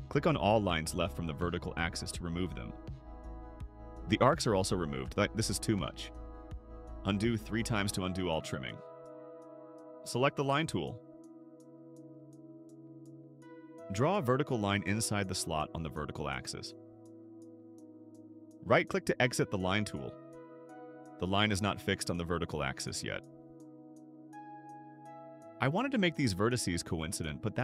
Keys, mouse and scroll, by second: 0.4 click, 1.0 click, 1.9 click, 6.0 click, 6.5 click, 7.1 click, 12.3 click, 12.9 scroll up 2, 14.2 click, 17.2 click, 20.0 right click, 21.8-23.5 drag, 23.9 click, 24.5 middle click, 24.8 middle click, 26.2 click, 27.0 click.